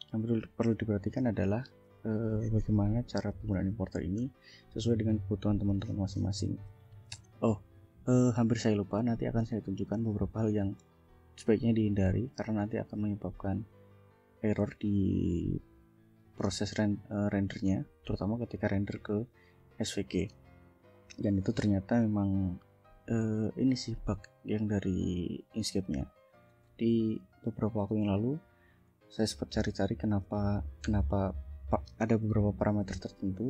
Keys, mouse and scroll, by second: 1.2 click, 26.1 click, 28.1 scroll down 1, 28.9-29.7 scroll up 2, 30.2 scroll down 1, 30.8 scroll down 1, 33.3-33.4 scroll up 2.